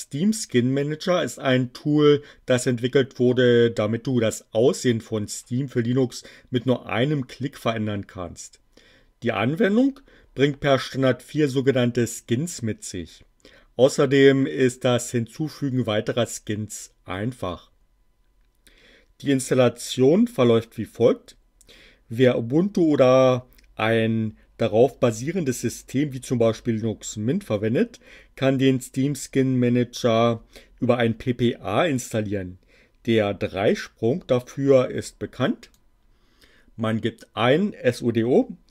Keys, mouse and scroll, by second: 35.6 click.